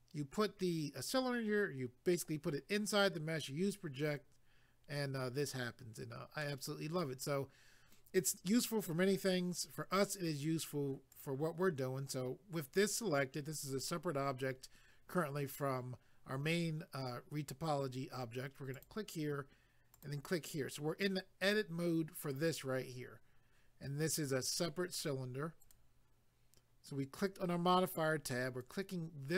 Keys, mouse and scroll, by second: 6.4 middle click, 11.1 click, 18.7 click, 19.9 click, 25.6 click, 28.6 click.